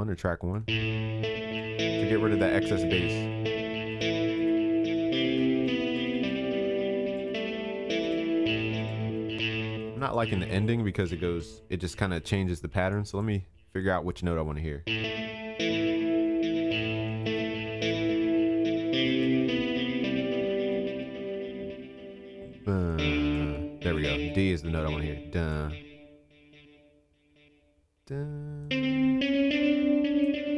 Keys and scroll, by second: 5.2 ctrl+s, 9.6 ctrl+space, 11.4 ctrl+s, 17.9 ctrl+s.